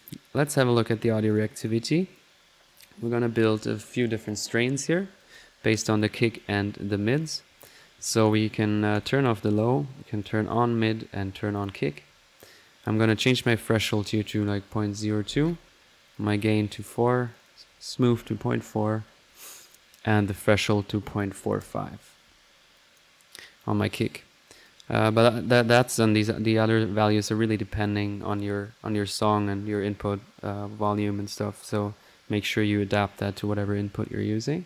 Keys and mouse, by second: 0.4 click, 1.0-3.6 typing, 1.3-2.6 drag, 3.0 right click, 3.3-3.7 right drag, 3.8 click, 5.2 click, 5.7 click, 6.2 drag, 6.7-7.2 middle drag, 7.2 click, 8.9 click, 10.2 click, 10.5-11.3 typing, 11.5-12.6 drag, 13.0-17.1 drag, 17.3 click, 18.9-19.7 typing, 20.1 click, 22.7 click, 23.4-23.8 drag, 24.5 click, 24.8-25.4 middle drag, 26.9-28.0 typing.